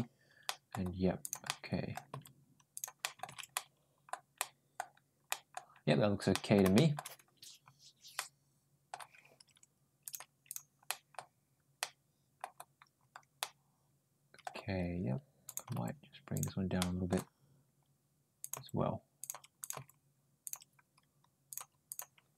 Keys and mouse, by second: 0.3 middle click, 1.0 click, 1.3 middle click, 1.9 g, 2.8 ctrl+middle click, 3.3 middle click, 4.2 middle click, 5.1 middle click, 6.1 ctrl+middle click, 6.6 ctrl+shift+middle click, 8.0 middle click, 10.0 click, 10.7 middle click, 11.7-12.2 middle drag, 13.2-14.2 middle drag, 14.5 Tab, 15.3 click, 15.5 g, 16.6 middle click, 18.2 click, 18.4 g, 19.4 click, 19.5 g, 21.5 click, 22.2 middle click.